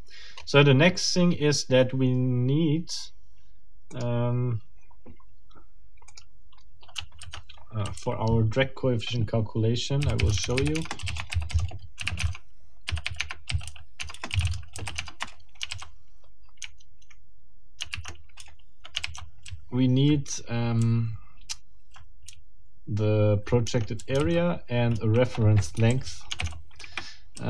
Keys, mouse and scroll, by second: 0.3 scroll up 2, 7.2 ctrl+alt+t, 8.0 ctrl+alt+Right, 10.0-15.7 typing, 10.8 Return, 11.2 Return, 13.2 Tab, 14.0 Tab, 14.1 Return, 15.0 Tab, 15.2 Return, 17.9 o, 18.4 Return, 19.0 g, 19.5 k, 22.3 j, 24.0-27.3 typing, 25.7 shift+Escape, 26.8 shift+Escape.